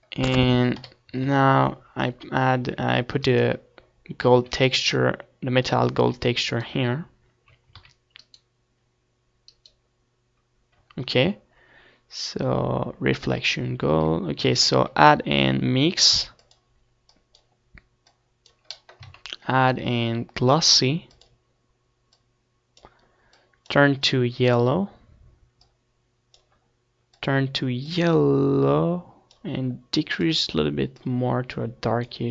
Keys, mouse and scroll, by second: 0.2-1.9 drag, 2.0-3.0 middle drag, 3.0 KP_7, 3.4 KP_Decimal, 4.9 z, 6.3 z, 8.0 z, 9.5-12.2 middle drag, 9.7 z, 12.2 right click, 12.5-20.6 middle drag, 12.9 click, 20.6-28.3 drag, 29.8-31.0 drag.